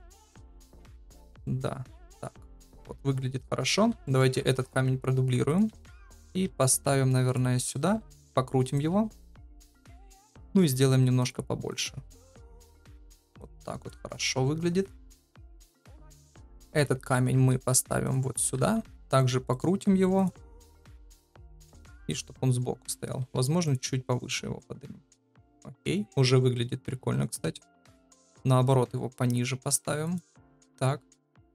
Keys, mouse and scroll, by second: 0.1 shift+middle click, 1.3 middle click, 1.8 KP_0, 3.3 KP_7, 4.0 shift+middle click, 4.4 shift+d, 5.7 shift+middle click, 6.4 g, 7.9 r, 9.2 KP_0, 10.4 s, 13.4-14.8 drag, 16.6 KP_7, 17.3 shift+d, 18.4 r, 19.8 s, 20.3 g, 21.0 KP_0, 23.1 g, 27.3 g.